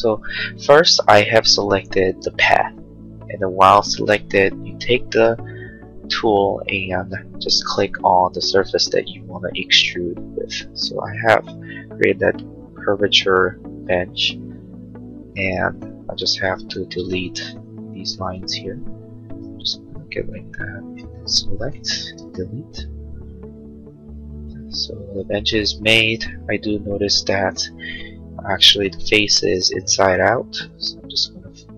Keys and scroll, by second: 16.0 space, 22.2 Delete.